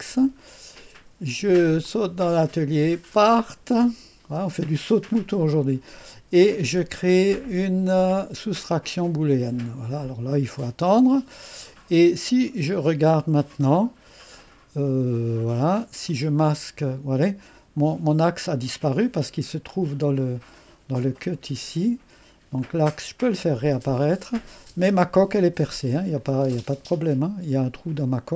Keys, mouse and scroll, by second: 1.9 click, 3.9 click, 8.6 click, 13.8-15.2 drag, 15.2-16.1 scroll up 2, 16.1-19.7 drag, 20.0 click, 20.2-21.2 scroll down 1, 22.6 click, 23.3 space, 26.2 click, 26.6 space, 27.7-28.3 drag.